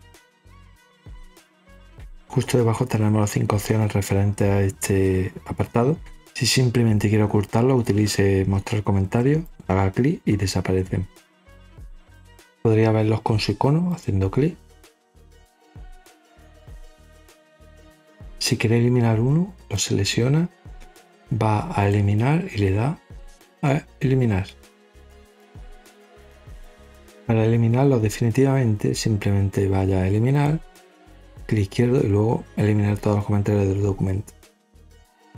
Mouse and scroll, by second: 0.5 click, 1.2 click, 9.4 click, 10.5-11.8 scroll down 8, 11.8 scroll up 2, 13.8 click, 15.5 click, 16.1 click, 17.3 click, 19.5 click, 21.7 click, 24.7 click, 30.2 click, 34.3 click.